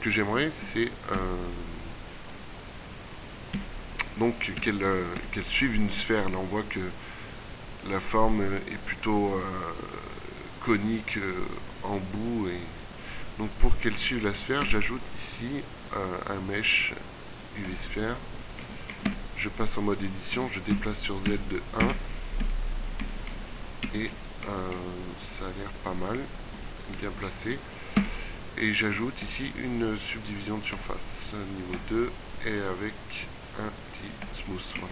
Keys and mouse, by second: 0.8 KP_5, 3.3 KP_5, 4.3 KP_1, 5.3 Tab, 13.9 shift+a, 18.7 Tab, 18.9 g, 18.9 z, 25.1-26.3 middle drag, 28.0 Tab.